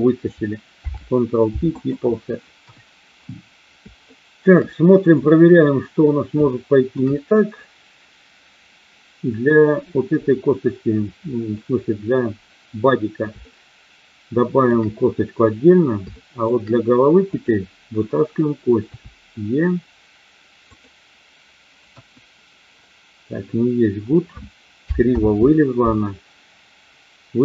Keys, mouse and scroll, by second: 0.6 ctrl+p, 2.5 KP_1, 4.0 shift+middle click, 6.4 shift+middle click, 13.4-14.6 shift+middle drag, 16.1 shift+middle click, 17.4 click, 18.9 e, 20.6 click, 21.9 KP_1, 25.0 ctrl+z.